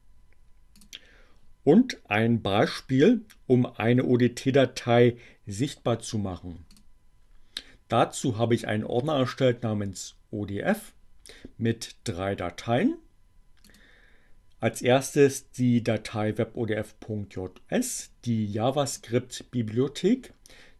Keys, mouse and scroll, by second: 0.6 click, 6.8 click, 13.7 click, 18.8 click.